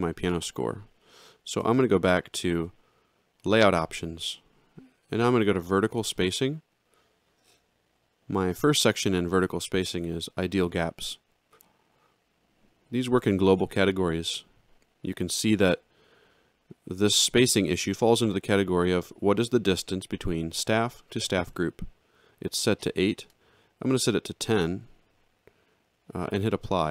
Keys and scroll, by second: 1.4 ctrl+shift+l.